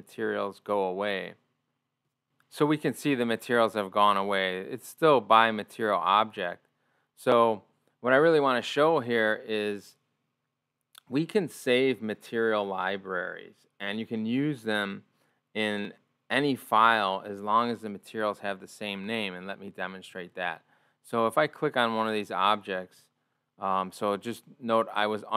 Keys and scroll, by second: 0.9 ctrl+o.